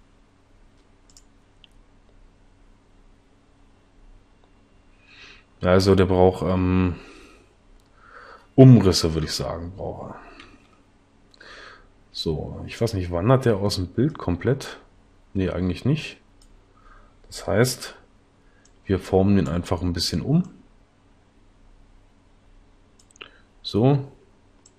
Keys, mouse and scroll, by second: 9.1 Escape, 10.5 Left.